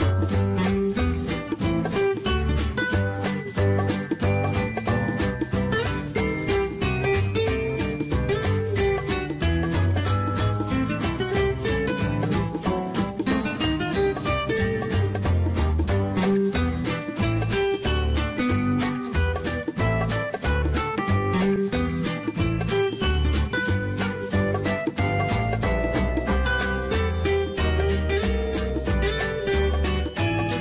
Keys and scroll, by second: 15.2-17.8 typing, 23.7 ctrl+z.